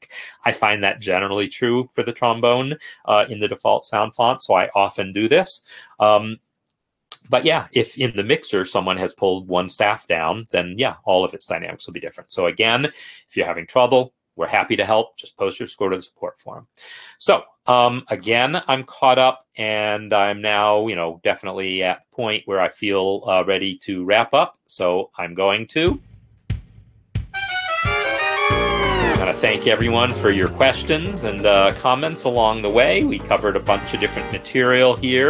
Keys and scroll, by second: 24.1 ctrl+Home, 25.7 space, 26.3 ctrl+F10, 29.4 Down.